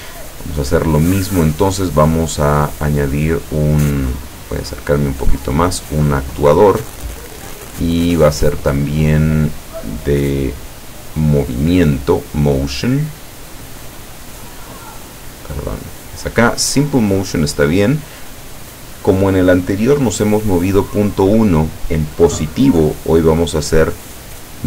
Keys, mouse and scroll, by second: 0.3 click, 2.8-3.4 scroll up 2, 3.5 scroll down 1, 4.1 scroll up 1, 4.9 click, 5.8-6.8 drag, 6.9 click, 11.9 click, 13.0 click, 15.6 click, 17.7 click.